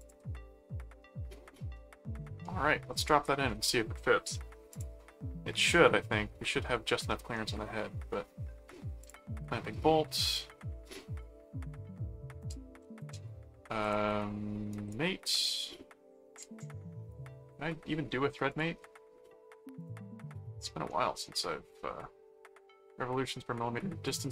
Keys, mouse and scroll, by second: 0.0 ctrl+click, 3.0 click, 4.7 click, 5.7-7.3 middle drag, 9.0 click, 10.3 click, 12.4 click, 12.8 s, 13.8 click, 14.7 right click, 16.5 right click, 18.5 click, 19.8 click, 20.6 middle click, 24.0 click.